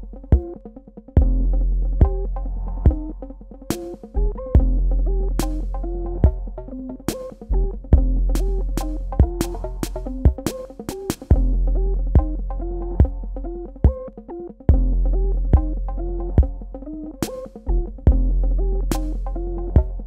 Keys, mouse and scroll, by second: 1.9 ctrl+z, 2.6 typing, 3.6 space, 4.0 click, 4.2 space, 8.7 shift+click, 11.3 shift+click, 19.2 ctrl+alt+click.